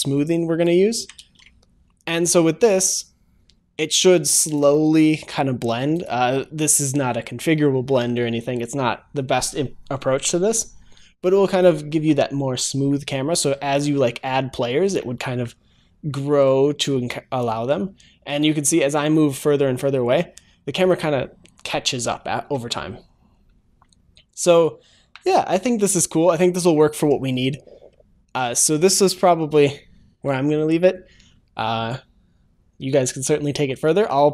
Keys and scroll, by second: 0.9 ctrl+s, 2.8 ctrl+shift+s.